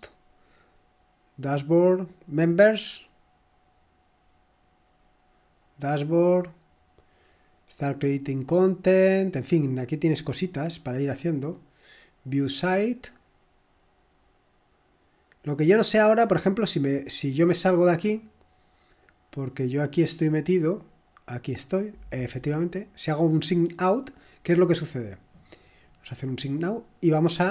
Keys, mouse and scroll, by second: 1.6 click, 2.9 click, 5.9 click, 10.3 scroll up 1, 10.8 click, 17.7 click, 20.0-20.7 scroll down 1, 22.1 click.